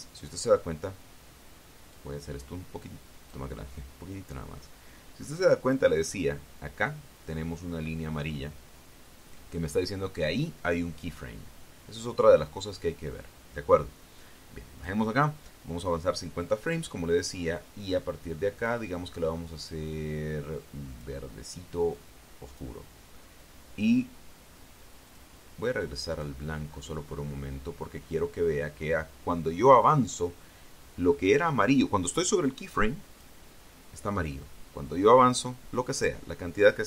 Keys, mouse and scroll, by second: 2.7-4.3 drag, 5.0-5.7 scroll up 1, 6.0 middle click, 14.0-15.9 drag, 19.4 click, 21.7 click, 22.8 click, 25.9 click, 26.9 click, 27.5-28.6 scroll up 4, 33.5 click, 36.6-36.8 drag.